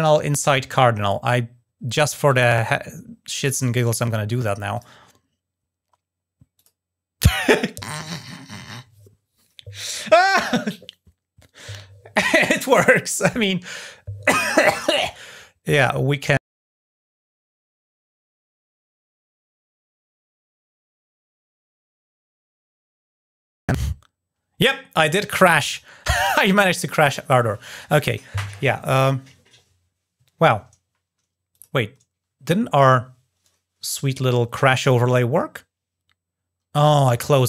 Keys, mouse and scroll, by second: 2.0 click, 3.0 click, 3.2 click, 4.5 click, 6.3 click, 16.8 click, 17.2 click, 18.5 click, 19.0 click, 19.5 click, 20.7 click, 21.2 click, 22.1 click, 22.7 click, 25.4 click, 31.3 click.